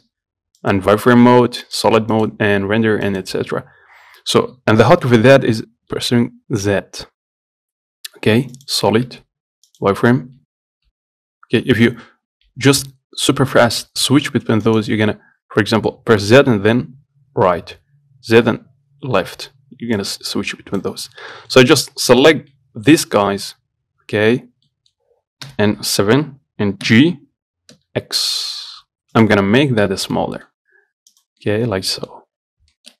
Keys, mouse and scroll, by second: 0.9 click, 1.9 click, 2.7 click, 6.9 z, 9.3 z, 16.6 z, 18.6 z, 20.2 click, 21.2 scroll up 1, 21.6 shift+middle click, 22.4-22.8 scroll down 3, 22.8 middle click, 23.1-24.5 scroll up 7, 24.5-24.9 scroll down 2, 24.9 middle click, 25.7 KP_7, 27.1 g, 29.8 Tab, 30.1 z, 30.4 middle click, 31.4 click, 31.7 middle click, 32.6-33.0 scroll up 1.